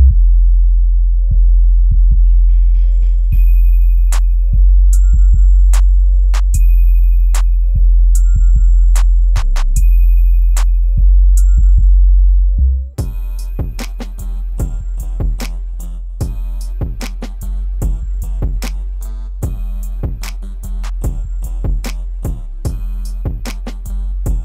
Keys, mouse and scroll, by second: 2.2-3.4 scroll up 1, 3.4-9.2 drag, 10.1-10.5 scroll down 1, 10.5 scroll up 1, 11.9 click, 12.5-14.2 scroll down 1, 14.3-16.2 drag, 16.2-17.6 scroll up 1, 17.6-20.3 drag, 21.1 scroll up 1, 22.2-24.4 drag.